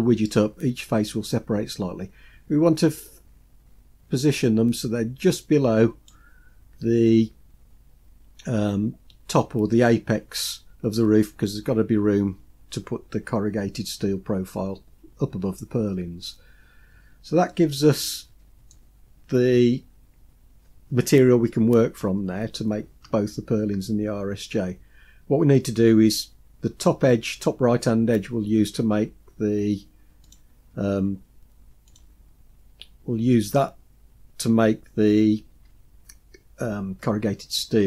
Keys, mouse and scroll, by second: 16.9-17.5 scroll down 2, 17.5-18.7 middle drag, 30.3 click, 31.9 click.